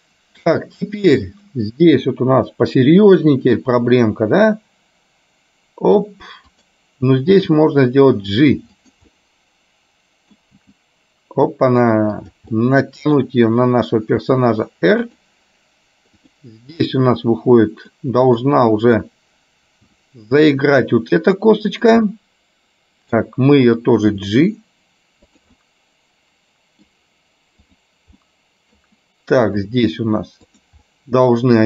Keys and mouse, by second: 3.2 r, 7.4 g, 9.2-10.3 middle drag, 10.8 g, 12.7 middle click, 14.4 r, 16.2 click, 17.1 middle click, 18.6 middle click, 20.1 r, 22.2-23.2 middle drag, 24.3 g, 25.7-26.9 middle drag, 27.7 click, 28.2 middle click, 29.7 r, 30.9-31.6 middle drag.